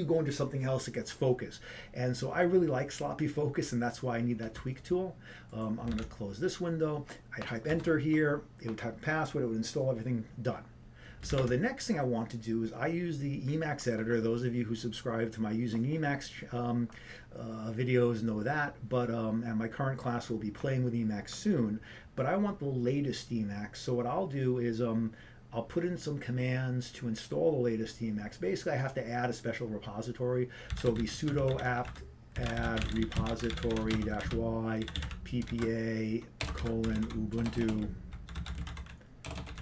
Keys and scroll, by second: 7.7 ctrl+d, 8.8 Return, 12.4 ctrl+c, 31.6 typing, 32.9 typing, 34.2 typing, 35.2 typing, 37.2 typing.